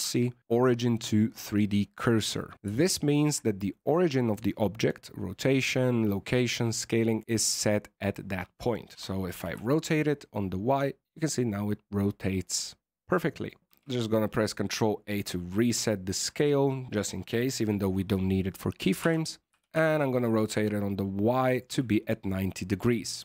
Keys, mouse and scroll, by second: 2.5 scroll down 6, 2.8 shift+middle click, 8.9 r, 13.6 ctrl+a, 15.5 scroll down 2, 15.8 shift+middle click, 16.3-16.7 scroll up 2, 19.0 r.